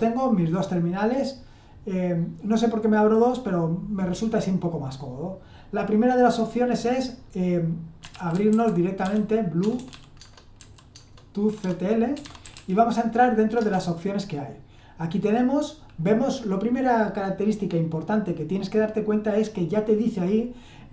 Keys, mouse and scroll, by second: 7.8-13.0 typing, 10.2 Tab, 13.6 Return.